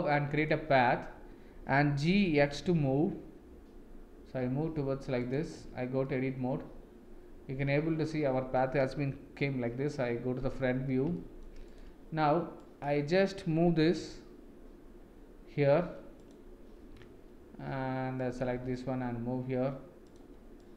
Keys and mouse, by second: 2.2 g, 5.5 Tab, 6.0-8.5 middle drag, 9.4 KP_1, 11.1-11.4 shift+middle drag, 11.7-12.4 drag, 12.5 drag, 13.8 g, 18.2 click, 18.5 g, 20.7 click.